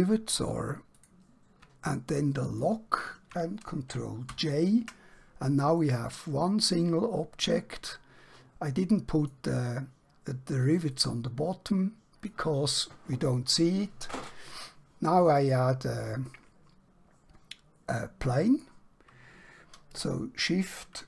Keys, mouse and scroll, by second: 0.9 click, 2.6 shift+click, 5.8 middle click, 16.4 middle click.